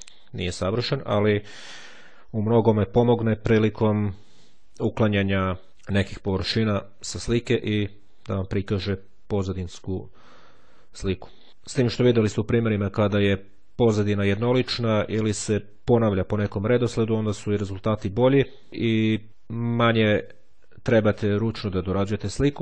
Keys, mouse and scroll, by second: 5.3-5.7 scroll up 1.